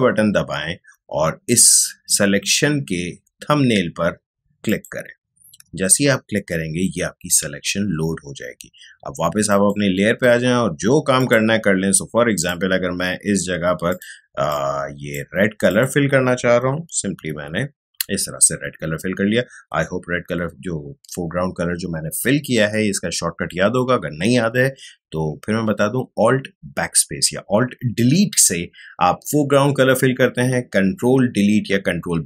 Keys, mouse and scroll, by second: 9.4 click, 17.1 alt+BackSpace.